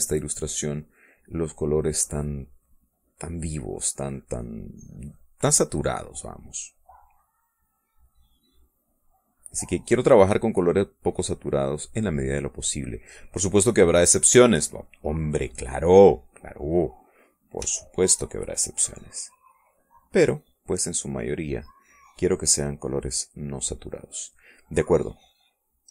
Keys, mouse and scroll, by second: 0.0-2.5 drag, 2.6 click, 3.4-6.9 drag, 7.0-12.5 drag, 12.7-13.8 drag, 14.1 middle click, 15.4 middle click, 16.1 middle click, 18.0 shift+click, 19.6-24.0 drag, 24.5 middle click.